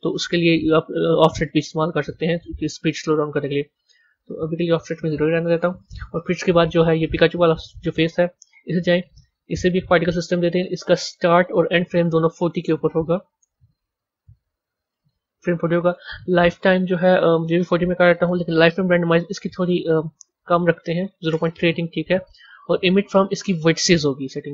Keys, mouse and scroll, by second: 1.7-4.7 drag, 6.9 click, 8.4 click, 9.7 click, 12.3-14.4 drag, 14.5-15.7 drag, 16.0-19.0 drag, 19.4-22.4 drag, 22.7-24.3 drag, 24.3-24.5 scroll down 4.